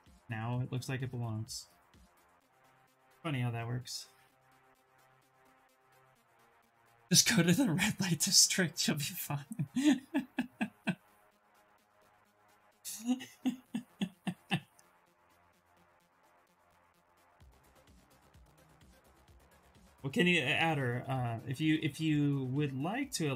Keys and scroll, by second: 21.1 ctrl+z, 21.2 ctrl+z, 21.4 ctrl+z, 21.5 ctrl+z, 21.7 ctrl+z, 21.9 ctrl+z.